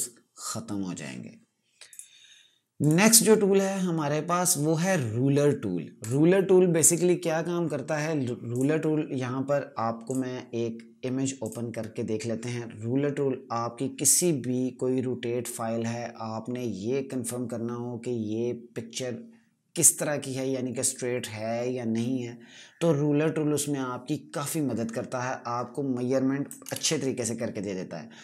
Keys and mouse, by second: 1.8 click, 2.7 right click, 5.9 click, 26.6 ctrl+KP_Add.